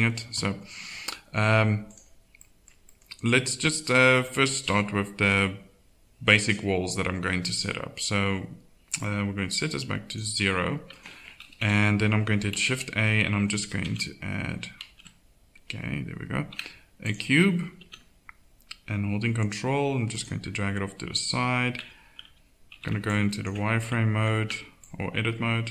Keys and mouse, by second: 4.6 KP_1, 10.5-11.6 middle drag, 11.6 a, 12.5 shift+a, 13.8 shift+a, 14.9 shift+a, 17.8 g, 21.8 Tab, 22.3 z, 22.7 a.